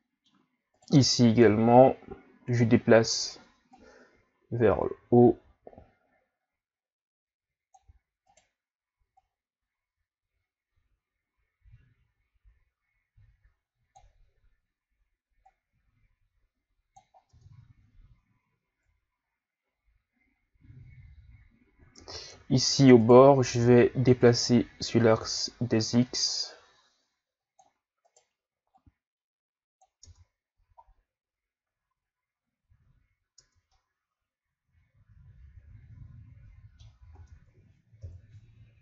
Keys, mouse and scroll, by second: 0.7 right click, 1.4 KP_1, 3.7 click, 8.3 right click, 9.2 click, 15.4 click, 17.3 Tab, 17.6-18.5 scroll down 1, 18.5-19.7 scroll down 1, 19.7-20.3 scroll up 1, 20.3-21.3 scroll up 1, 21.3-21.9 scroll up 1, 21.9 Tab, 22.5-23.0 scroll down 1, 23.0 right click, 24.2 click, 28.1 right click, 28.7 click, 30.0 Tab, 30.5 a, 30.8-33.4 scroll down 3, 33.4 Tab, 33.7-36.7 middle drag, 37.1 Tab, 38.0 KP_1.